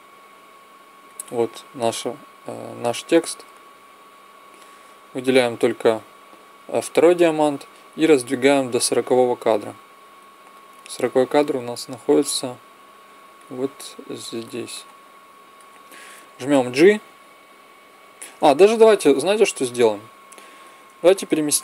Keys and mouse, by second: 1.7-3.7 drag, 4.4-6.1 drag, 10.6 click, 11.8 click, 16.7 g.